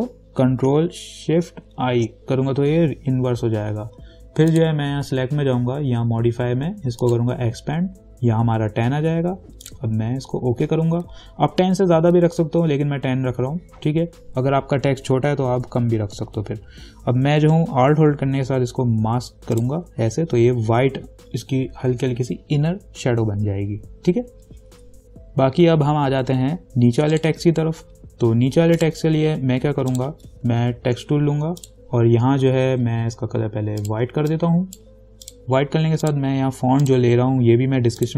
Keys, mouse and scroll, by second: 2.1 ctrl+shift+i, 4.7 click, 7.2 click, 9.8 click, 19.8 alt+click, 27.3 click, 31.2 t, 31.8 click, 34.0-38.1 drag.